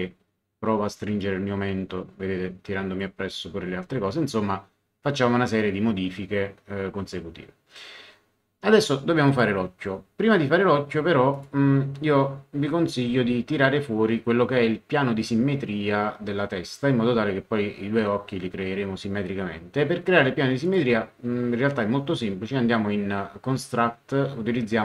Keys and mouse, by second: 1.2 click, 9.2 click, 11.3 click, 20.6 click.